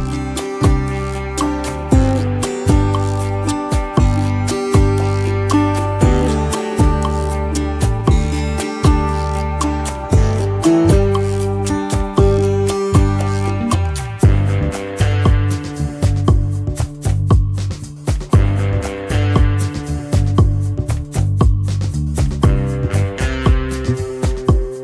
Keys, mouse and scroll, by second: 2.4 i, 5.5 double click, 16.9 space.